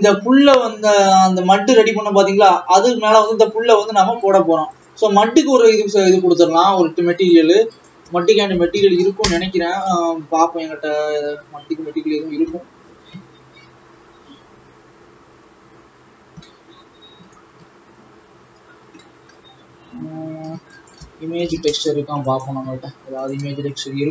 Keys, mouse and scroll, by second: 3.1-5.2 drag, 6.6 click, 7.2-9.8 drag, 9.8 ctrl+s.